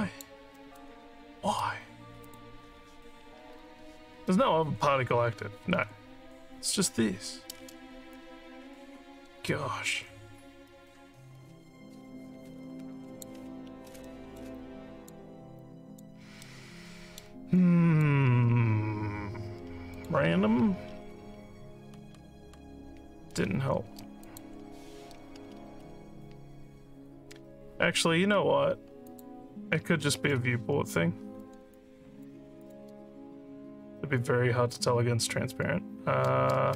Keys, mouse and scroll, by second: 0.5 alt+middle click, 2.2 click, 4.5 scroll down 1, 5.8 scroll up 3, 8.1-13.2 alt+drag, 14.0 alt+middle click, 14.5 alt+click, 15.6 alt+click, 16.4 alt+middle click, 17.5 alt+click, 19.9 click, 24.2 click, 29.0 click, 31.7 alt+click, 32.7 click.